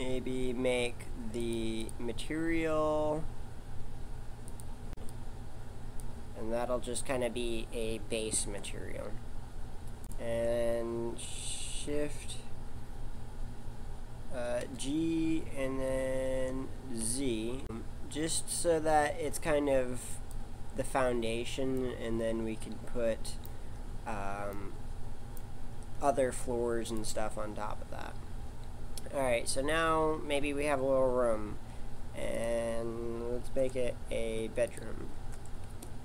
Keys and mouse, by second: 0.8 click, 8.4 shift+a, 14.6 g, 21.7-25.7 middle drag, 25.7 shift+a, 27.5-28.9 middle drag, 32.3 click, 34.7 click.